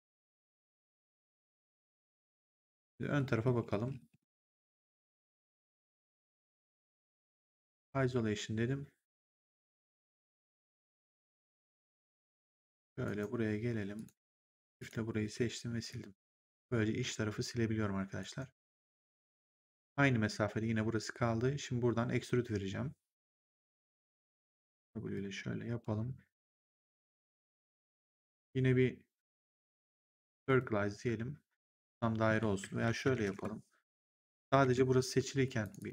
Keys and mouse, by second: 1.2 click, 3.0 middle click, 5.7 middle click, 6.7 click, 7.4 ctrl+1, 13.0 right click, 13.8 click, 14.6 shift+click, 15.4 Delete, 15.8 click, 16.6 Delete, 18.1 right click, 19.4 click, 23.5 click, 24.2 w, 25.0 click, 29.2 click, 30.4 click, 32.7 ctrl+z, 34.5 ctrl+z, 35.5 click.